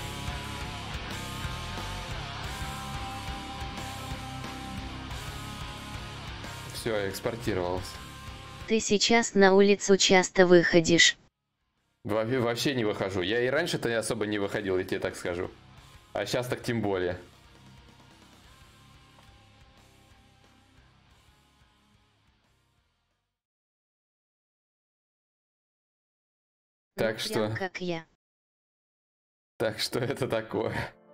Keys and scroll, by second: 7.1 alt+Tab, 17.8 shift+d, 19.0 shift+d.